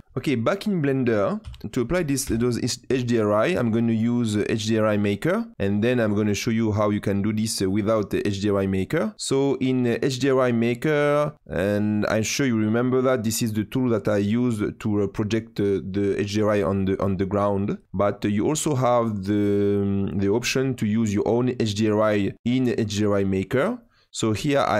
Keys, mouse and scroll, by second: 1.6 click, 2.2 n, 5.1 click, 11.2 click, 19.4 click, 23.8-24.7 drag.